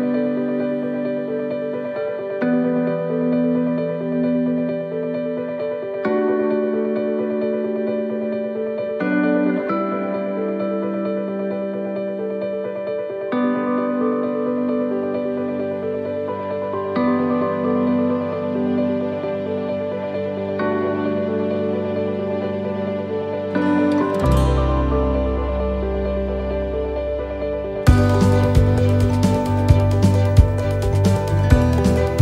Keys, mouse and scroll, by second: 1.7 shift+d, 2.9 click, 5.1 middle click, 6.8 click, 14.5 shift+d, 15.2 middle click, 16.3 r, 20.0 click, 22.0 middle click, 24.5 click, 26.1 middle click, 30.0 shift+d, 31.1 r.